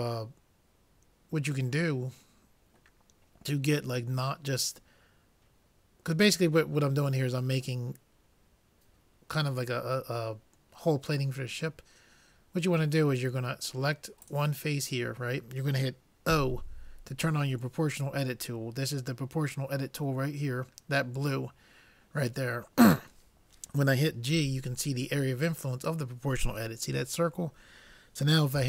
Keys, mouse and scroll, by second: 14.7-16.2 drag, 16.3 o, 24.4 g.